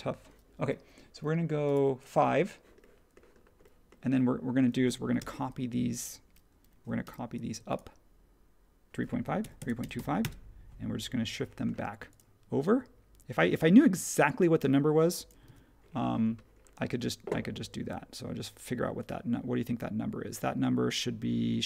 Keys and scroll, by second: 5.1 m, 7.0 m, 9.1-10.4 typing, 12.2 typing, 15.4 super+1, 17.8 super+z.